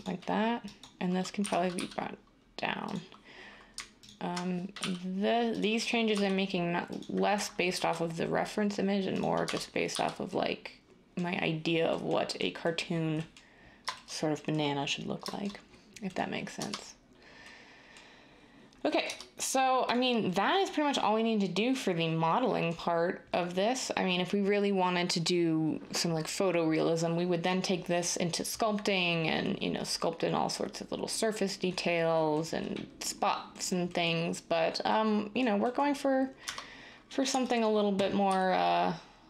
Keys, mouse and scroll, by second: 1.4-1.7 typing, 4.8 r, 6.1 s, 7.7 ctrl+b, 9.4 Tab, 9.9 typing, 16.5 Tab, 19.9 Tab, 36.4 Tab, 38.2 s.